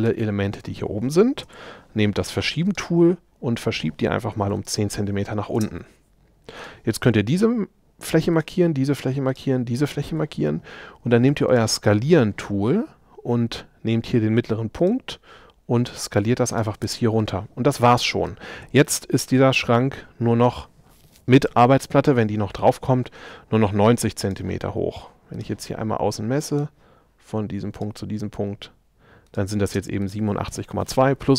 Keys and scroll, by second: 4.4 i, 16.9 space, 29.7 space.